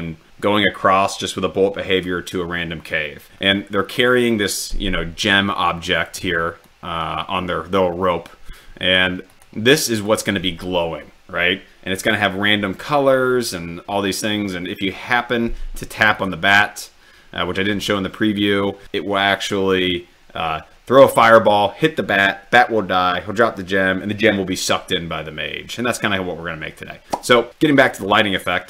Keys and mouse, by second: 6.9-9.6 drag, 10.1 click.